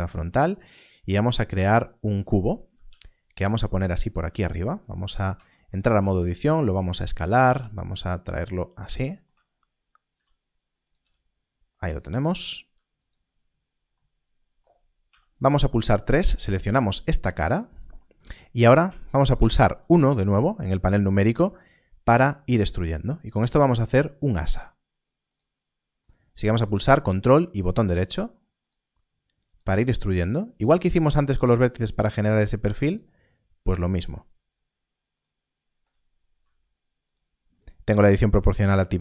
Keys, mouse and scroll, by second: 2.1 shift+a, 2.7 click, 4.0 click, 5.2 Tab, 6.8 s, 6.8 click, 8.3 g, 8.4 click, 9.4-10.0 scroll up 1, 10.7 s, 10.8 click, 11.7 g, 11.8 click, 12.1 r, 12.9 click, 15.0 3, 16.0 click, 18.7 KP_3, 19.2 KP_1, 25.2 ctrl+click, 27.5 ctrl+right click, 28.5 ctrl+right click, 29.4 ctrl+right click, 30.5 ctrl+right click, 31.4 ctrl+right click, 32.8 ctrl+right click, 33.7 ctrl+right click, 35.1 ctrl+right click, 36.2 s, 37.0 right click.